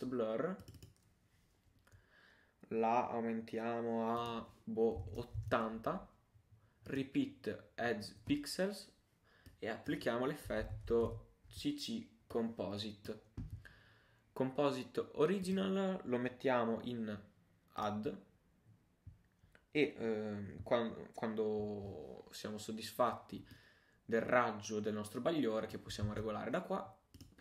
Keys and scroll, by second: 26.1 super+z.